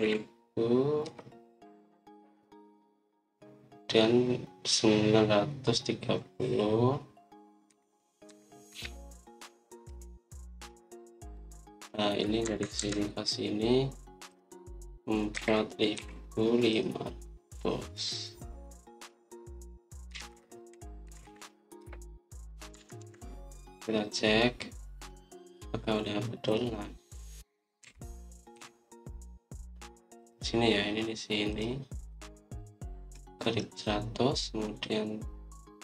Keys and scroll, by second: 0.0-0.6 typing, 1.9 Return, 8.6-9.6 typing, 10.8 Return, 13.3 Escape, 13.7 Escape, 16.2-16.8 typing, 20.7-22.0 typing, 22.7 Return, 23.4-24.4 typing, 29.6-30.4 typing.